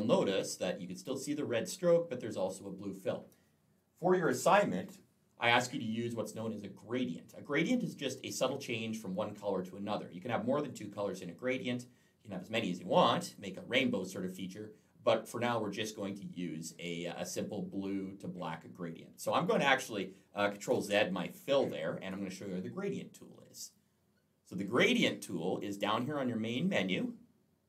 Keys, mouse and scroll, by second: 20.6 ctrl+z.